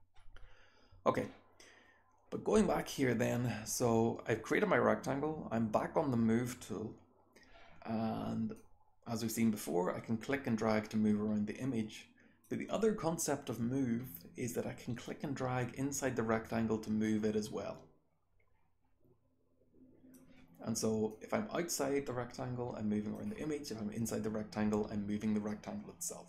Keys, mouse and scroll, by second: 8.5-12.4 drag, 8.5-12.4 scroll down 1, 12.4-15.0 scroll down 1, 15.0-20.1 drag, 15.0-20.1 scroll down 1, 20.1-21.0 scroll down 1, 21.0-23.1 drag, 21.0-23.1 scroll down 1, 23.1-23.6 scroll down 1, 23.6-26.2 drag, 23.6-26.2 scroll down 1.